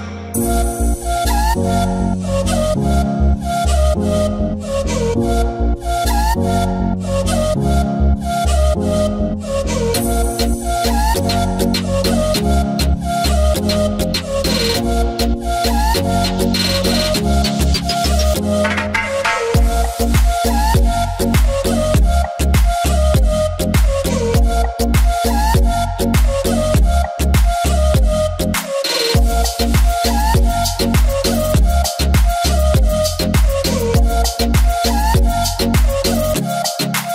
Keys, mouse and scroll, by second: 0.0 click, 2.6 i, 3.8 v, 4.0 right click, 4.8 click, 5.9 v, 6.1 click, 9.0-9.3 alt+scroll up 1, 9.9-11.4 drag, 11.4-11.7 ctrl+scroll down 1, 11.7 scroll up 1, 13.2-18.1 drag, 18.4-20.7 drag, 20.7-23.2 drag, 23.9-24.3 scroll down 1, 24.3 alt+scroll down 1, 24.4-30.6 drag, 30.6 v, 30.7 click, 31.1 alt+scroll down 2, 31.4-32.3 ctrl+scroll up 3, 32.4 click, 34.7-37.1 drag.